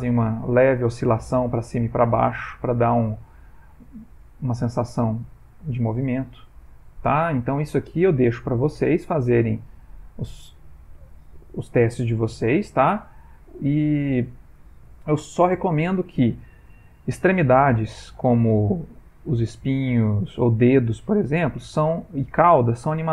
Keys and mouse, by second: 0.5 click, 7.5 click.